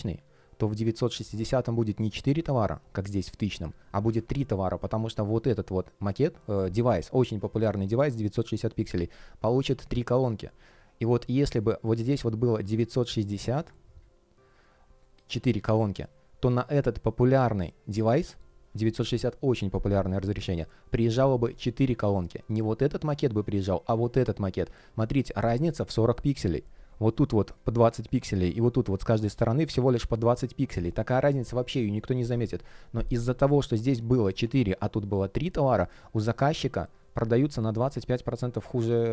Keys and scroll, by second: 3.8 super+z, 24.5 super+z.